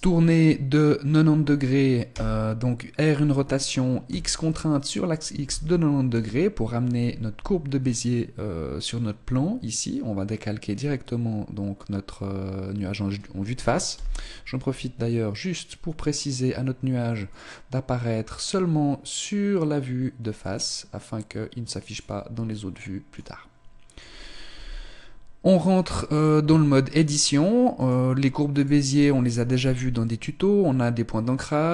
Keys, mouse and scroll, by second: 2.0 r, 14.0 n, 15.1 click, 17.3 click, 21.9 click, 23.2 click, 24.5 n, 25.8 right click, 26.5 Tab, 27.8 right click, 28.6 right click.